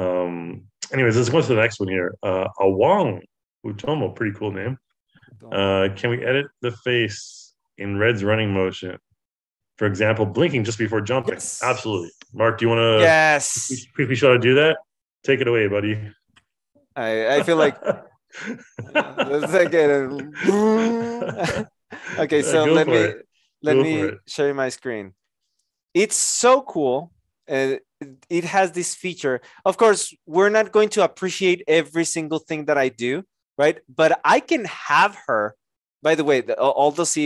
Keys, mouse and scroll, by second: 24.0 Return.